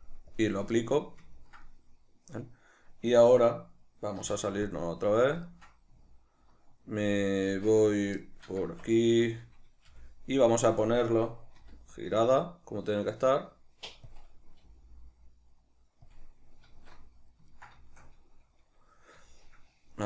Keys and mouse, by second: 0.9-5.5 shift+middle drag, 4.3 q, 7.6 alt+q, 8.3 shift+middle click, 8.8 Tab, 9.2 a, 11.0-14.2 drag, 11.7 r, 14.8 g, 16.3 click, 16.9 alt+q, 17.7-20.0 ctrl+shift+middle drag.